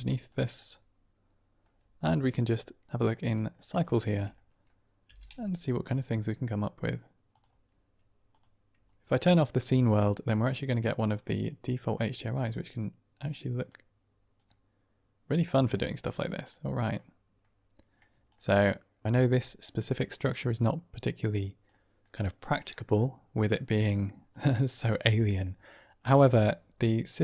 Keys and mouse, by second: 0.2 click, 0.5-1.1 middle drag, 1.1 click, 3.0-3.5 drag, 3.7-4.1 shift+middle drag, 4.4 middle click, 5.2 g, 5.4 z, 8.2-14.1 drag, 14.3-15.3 middle drag, 15.5 click, 16.0-16.5 drag, 17.0-17.3 drag, 18.3 middle click, 19.1-19.5 middle drag, 20.3-21.3 middle drag, 21.7 middle click, 22.7 middle drag, 23.4-23.9 middle drag, 24.3-24.7 middle drag, 25.3 drag.